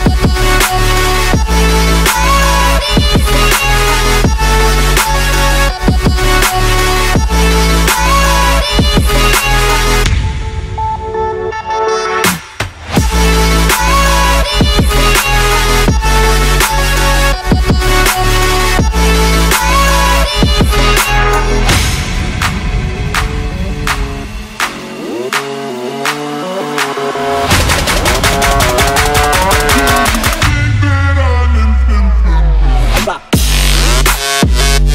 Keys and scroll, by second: 4.0 ctrl+z.